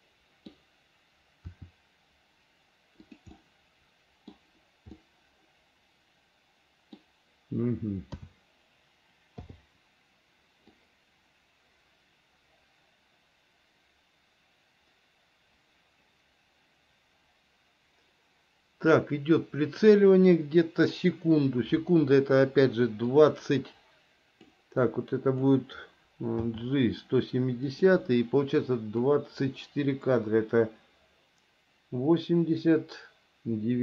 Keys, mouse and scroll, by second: 1.7 r, 3.6 middle click, 5.2-7.2 middle drag, 8.4 a, 9.7 i, 11.0-20.1 drag, 23.4-24.7 drag, 25.0 click, 26.6 g, 29.4-33.8 drag.